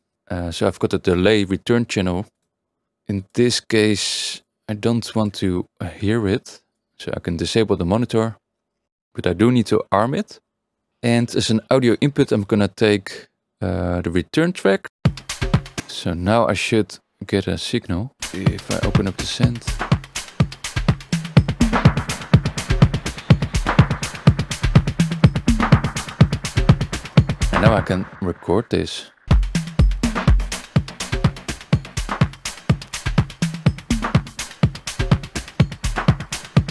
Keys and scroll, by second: 15.2 space, 27.3 Tab, 27.7 space.